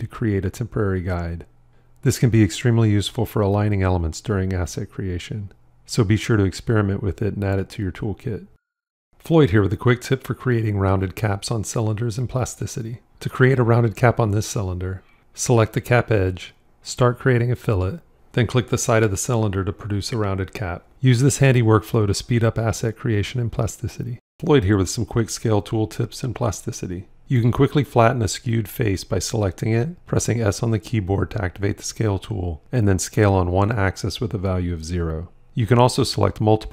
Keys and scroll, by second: 30.0 s.